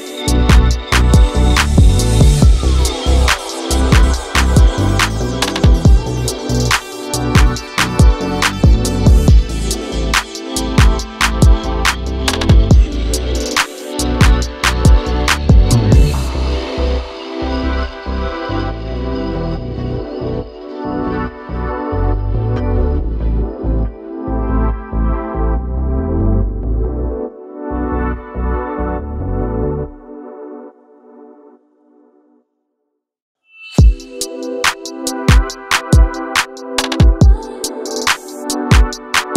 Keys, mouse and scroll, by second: 0.3 s, 0.7 g, 1.6-2.7 drag, 2.7-3.1 middle drag, 3.1 scroll down 1, 3.3-4.7 middle drag, 4.7 KP_7, 5.3 shift+middle click, 5.5-6.0 scroll up 1, 6.0 shift+d, 7.5 shift+middle click, 7.8 r, 9.4 g, 11.5 scroll down 1, 11.8 shift+middle click, 12.4 click, 12.6-14.6 middle drag, 14.6-16.6 drag, 16.6 0, 16.9 0, 17.6-19.2 scroll down 9, 18.0 click, 18.6 click, 19.2 click, 19.4-19.9 scroll down 1, 19.9-21.4 drag, 21.4-22.4 scroll up 12, 22.4 click, 22.8-23.1 scroll up 1, 23.1 click, 23.6 0, 23.7 0, 23.9 0, 24.9 drag, 25.2 click, 26.2 shift+a, 27.4 KP_0, 28.1 n, 28.8-29.4 drag, 29.7-30.3 scroll down 10, 30.3-32.0 middle drag, 32.0 scroll up 1, 32.2-33.5 middle drag, 33.5 click, 34.5 0, 35.1-36.1 scroll down 7, 36.1-38.2 shift+middle drag, 38.2 click, 38.7-39.3 shift+middle drag.